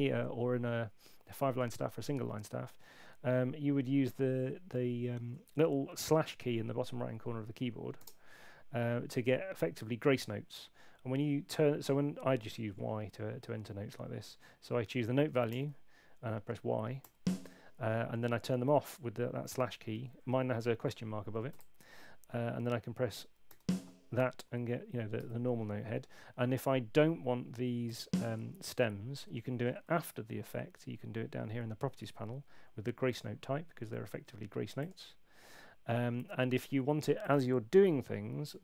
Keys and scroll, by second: 8.0 /, 15.5 5, 17.0 y, 21.5 /, 23.5 /, 29.9 super+8.